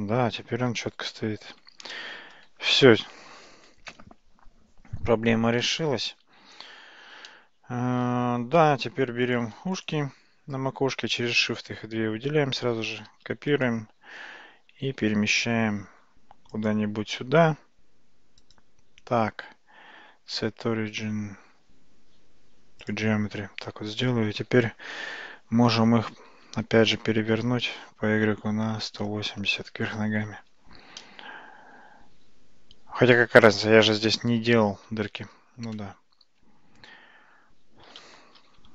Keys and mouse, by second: 1.9-2.5 shift+middle drag, 7.3-8.1 shift+middle drag, 9.4 click, 9.8 shift+click, 13.3 shift+d, 14.9 g, 18.5-23.0 right drag, 26.2 r, 31.1-35.7 middle drag, 36.0 ctrl+z, 36.5 ctrl+z, 38.4 ctrl+shift+z.